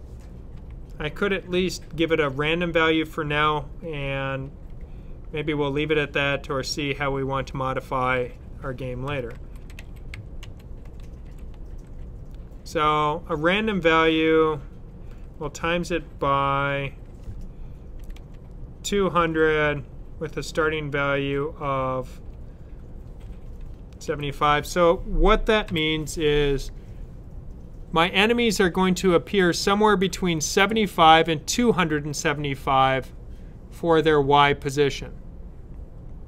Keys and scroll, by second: 8.7-11.7 typing, 15.3 typing, 17.3-18.0 typing, 20.4 typing, 23.6-24.0 typing, 25.6 typing.